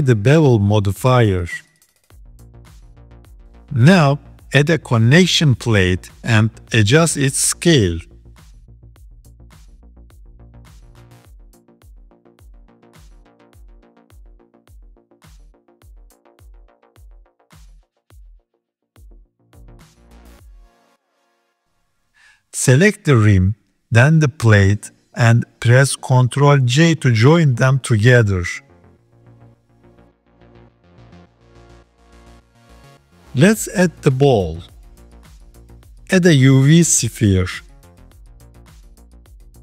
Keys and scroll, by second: 5.5 shift+a, 7.9 KP_3, 8.7 s, 10.1 s, 12.2 g, 14.5 KP_7, 15.5 s, 17.2 s, 18.9 g, 27.6 ctrl+j, 30.3 g, 37.1 shift+a.